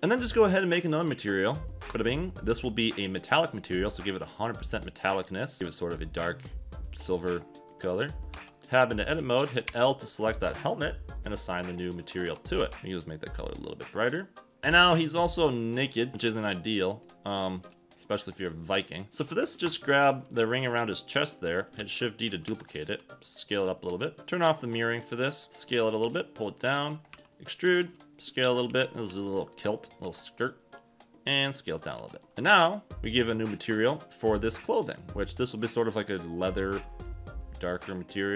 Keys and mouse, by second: 1.1 click, 2.0 click, 3.5 click, 8.3 Tab, 9.7 l, 11.5 click, 12.0 q, 12.6 Tab, 19.1 Escape, 19.1 v, 19.1 a, 21.8 shift+d, 22.4 Escape, 22.8 s, 23.9 Escape, 25.5 Escape, 25.5 s, 25.5 shift+d, 25.8 click, 26.0 g, 26.7 click, 27.1-30.0 typing, 27.7 click, 29.4 click, 31.9 s, 32.3 Tab, 32.3 g, 33.8 click, 34.9 click.